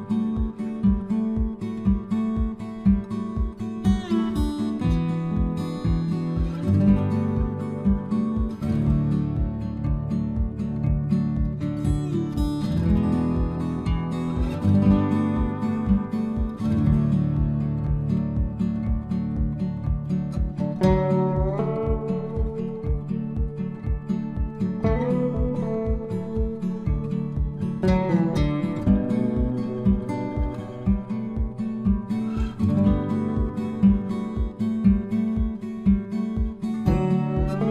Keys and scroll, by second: 8.5 ctrl+v, 11.9 Return.